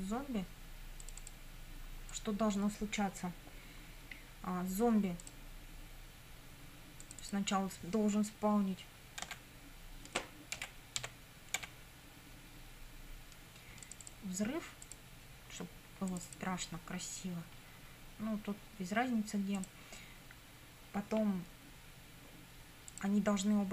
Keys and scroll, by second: 9.3 p, 10.6 BackSpace, 11.1 s, 11.6 p.